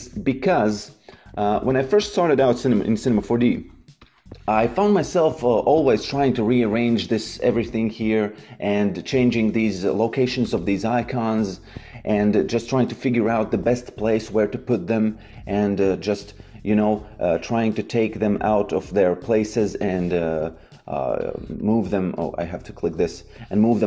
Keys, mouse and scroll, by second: 5.8 click, 10.4 click, 14.8 click, 18.7 click, 21.1 ctrl+click.